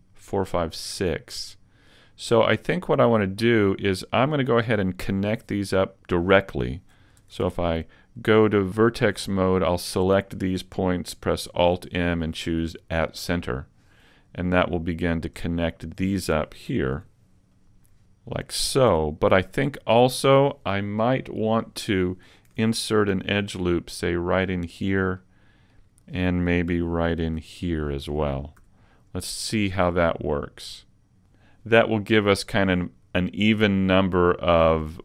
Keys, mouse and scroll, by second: 1.0 middle click, 4.4 scroll up 2, 7.2 ctrl+Tab, 8.0-8.7 scroll up 1, 8.7 right click, 8.7-9.4 scroll up 1, 9.5 shift+right click, 11.6 alt+m, 15.0 right click, 16.0 shift+right click, 17.0 alt+m, 18.9 a, 19.2 scroll down 2, 19.6 middle click, 23.1 ctrl+r, 24.7 click, 25.2 middle click, 27.2 ctrl+r, 28.2 click, 28.6 a, 28.9-29.2 scroll down 3, 29.2 middle click.